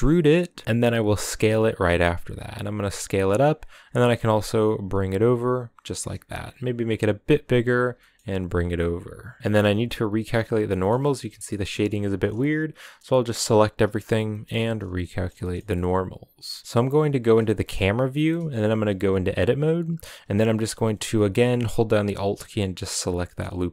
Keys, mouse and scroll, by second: 3.6 g, 7.2 s, 7.7 g, 8.5-11.3 middle drag, 11.3 a, 11.5 a, 13.0-14.0 middle drag, 14.0 shift+n, 14.4-17.0 middle drag, 17.0 KP_0, 17.9 shift+middle drag, 18.1 scroll up 5, 18.8 Tab, 21.0 scroll up 2, 21.8 alt+right click, 23.0 shift+middle click, 23.5 s.